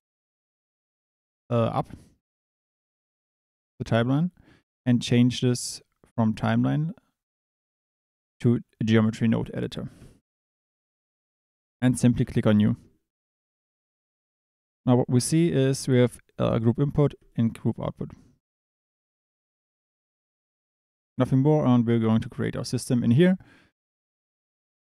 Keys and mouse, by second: 5.0-10.5 drag, 14.4 middle click, 16.3 click, 17.2 click.